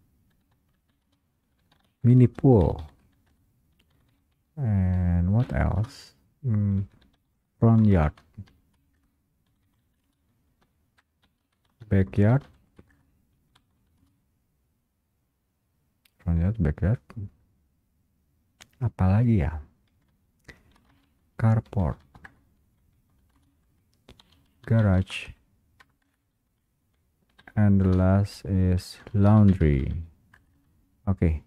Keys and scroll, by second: 1.2 Return, 1.2 space, 3.4 Return, 8.0 space, 9.0 Return, 10.2 space, 12.2 space, 13.0 Return, 14.2 space, 22.4 space, 22.4 Return, 23.4 space, 26.2 Return, 28.0 Return, 28.0 space, 30.4 Return.